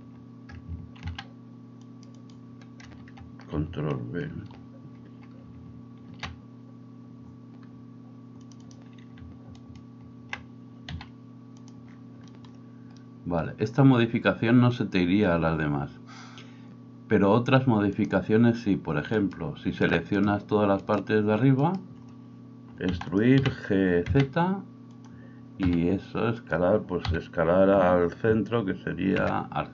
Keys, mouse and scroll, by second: 1.0 ctrl+r, 2.3-8.7 middle drag, 6.1 ctrl+b, 8.7 click, 9.2 alt+middle click, 9.5 alt+right click, 9.9-18.1 alt+middle drag, 10.9 s, 18.1-23.3 drag, 19.2 middle click, 19.2 right click, 20.8 shift+middle click, 20.8 shift+right click, 21.6 shift+middle click, 21.6 shift+right click, 22.9 e, 23.3-29.7 middle drag, 23.4 g, 25.7 s, 27.0 s.